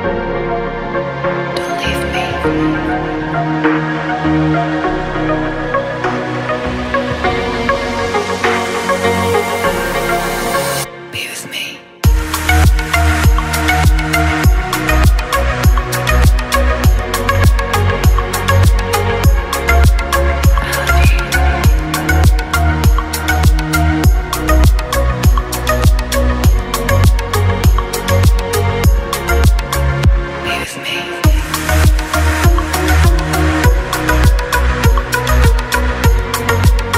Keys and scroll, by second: 14.9 Return, 25.7 ctrl+], 27.6 a.